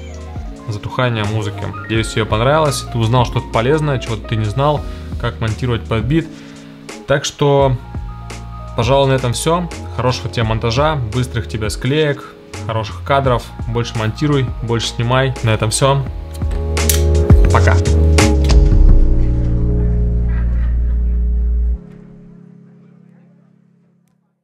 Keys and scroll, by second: 0.5 space.